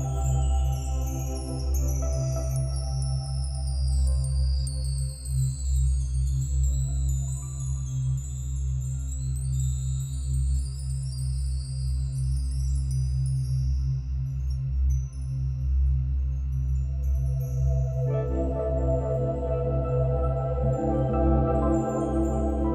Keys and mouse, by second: 0.0-1.8 drag, 3.7-4.5 drag, 5.2-6.0 drag, 7.4-8.3 drag, 9.7 click, 10.7-11.7 drag, 12.6-13.6 drag, 13.8-14.7 drag, 15.5-17.3 drag, 18.0-19.2 drag, 19.3-20.0 ctrl+alt+drag, 20.2-21.6 ctrl+alt+shift+drag, 21.8 g.